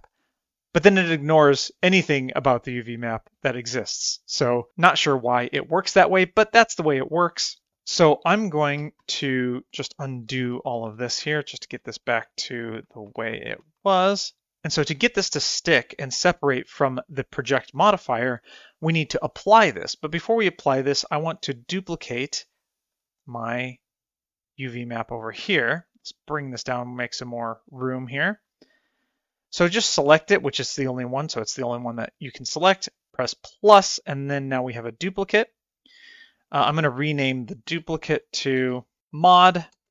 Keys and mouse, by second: 9.4 t, 11.0 ctrl+z, 11.2 ctrl+z, 11.4 ctrl+z, 11.7 ctrl+z, 11.9 ctrl+z, 12.1 ctrl+z, 12.3 ctrl+z, 12.5 ctrl+z, 12.7 ctrl+z, 12.9 ctrl+z, 13.2 ctrl+z, 13.4 ctrl+z, 13.6 ctrl+z, 13.9 ctrl+z, 14.3 ctrl+z, 23.6 click, 26.7-28.5 drag, 34.0 click, 37.3 click, 37.6 click, 38.9 BackSpace, 39.0 shift+click.